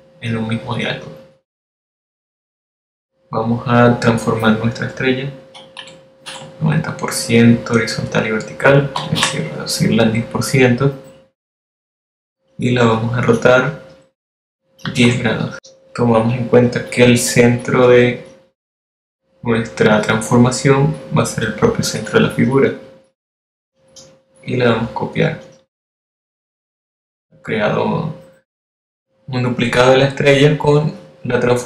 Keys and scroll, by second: 7.1 9, 7.6 0, 10.1-11.0 typing, 16.2 0.